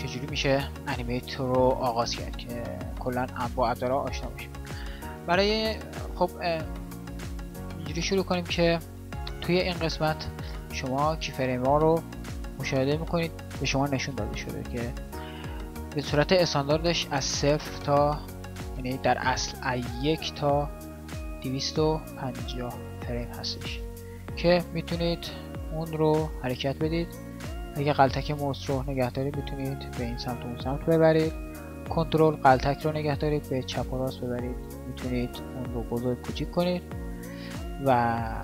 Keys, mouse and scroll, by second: 7.7 click, 8.1 click, 8.3 click, 8.5 click, 8.7-9.2 drag, 25.5-29.0 drag.